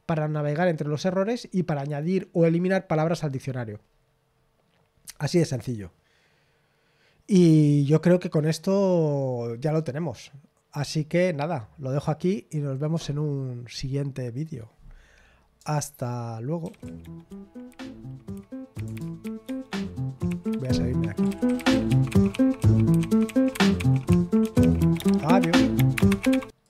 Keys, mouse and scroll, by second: 1.3-3.8 scroll down 1, 3.8-14.6 scroll down 1, 14.6-16.6 scroll down 1, 16.6 super+x, 19.4 super+q, 21.0-22.2 typing, 26.6 click.